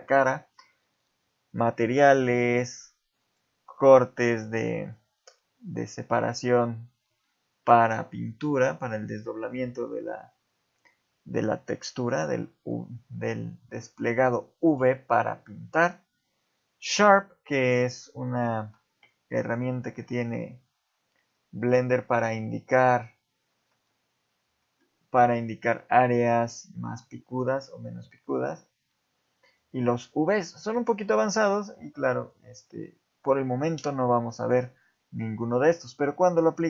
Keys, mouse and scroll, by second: 1.5 click, 3.2 click, 13.4 click, 14.5 alt+shift+click, 16.7 click, 20.9-23.7 scroll up 23, 24.8 shift+middle click, 25.7 scroll up 2, 29.5 click, 30.2-30.7 scroll down 1, 30.7 shift+middle click, 30.7-31.3 scroll down 1, 31.5 shift+click, 32.2 shift+click.